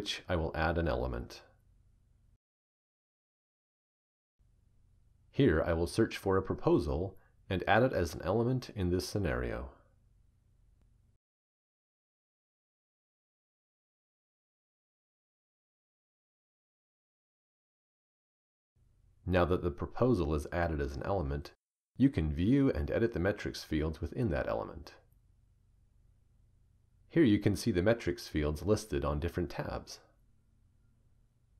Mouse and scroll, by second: 10.1 click, 15.4-18.1 drag, 26.3-27.2 drag.